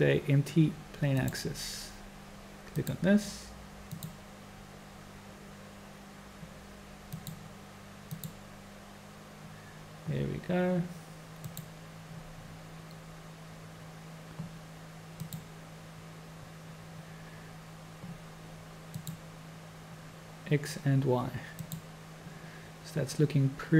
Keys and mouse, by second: 2.7 click, 3.9-8.7 drag, 12.4 click, 17.4 click, 19.6 click, 21.5 click.